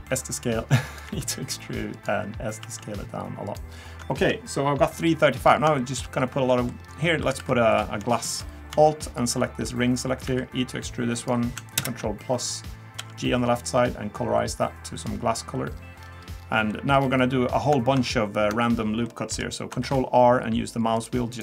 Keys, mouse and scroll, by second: 0.0 s, 1.0 e, 2.6 s, 3.7 scroll down 3, 4.9-5.4 scroll down 2, 5.5 scroll up 3, 5.8 shift+middle click, 6.2-6.5 scroll up 1, 6.5 middle click, 6.8-7.2 scroll up 2, 7.2 3, 7.4 3, 7.7 click, 9.2 alt+click, 10.3 e, 11.8 ctrl+KP_Add, 13.0 g, 15.7-16.0 scroll down 2, 16.0-16.4 scroll up 2, 16.4 scroll down 1, 16.4 scroll down 1, 16.7 middle click, 17.0-17.4 scroll down 1, 17.7 scroll down 1, 18.2 scroll up 1, 19.0 shift+middle click, 19.8 ctrl+r.